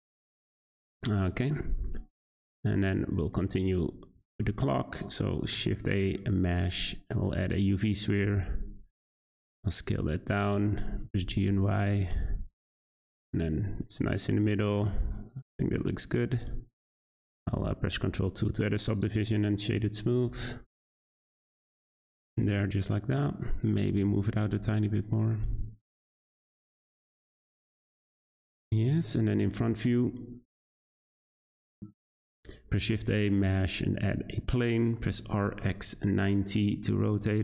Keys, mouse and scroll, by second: 0.7-1.0 scroll down 2, 1.0-2.7 shift+middle drag, 2.7 scroll up 3, 2.9-4.1 scroll down 1, 4.1 shift+a, 8.0 Tab, 8.2 a, 8.4 s, 10.4 Tab, 10.7 g, 12.9 shift+middle drag, 13.2 `, 13.7-14.3 scroll up 7, 14.3-15.3 middle drag, 15.3-16.3 right drag, 16.3-16.9 scroll down 2, 16.9-18.3 scroll down 3, 18.3 ctrl+2, 19.0 scroll up 2, 19.2 click, 20.0 click, 20.2 g, 21.4 click, 21.7 scroll down 3, 21.9-23.6 middle drag, 23.6 click, 23.9 g, 26.8 click, 27.1 scroll up 1, 27.2 scroll down 2, 27.4-28.2 middle drag, 28.2 `, 29.2 scroll up 2, 29.5 shift+a, 35.0 r.